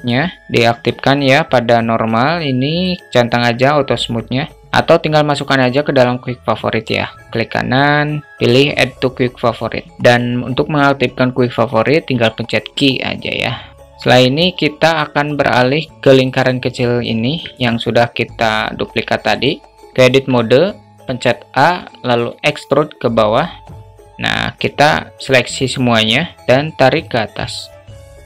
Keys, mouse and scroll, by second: 2.3 click, 12.3 q, 15.0-15.6 middle drag, 15.9 middle click, 16.5-17.1 middle drag, 19.8 Tab, 20.5 a, 21.8 e, 24.1 a, 24.7 a, 26.2 click, 26.3 ctrl+z, 26.5-27.8 drag.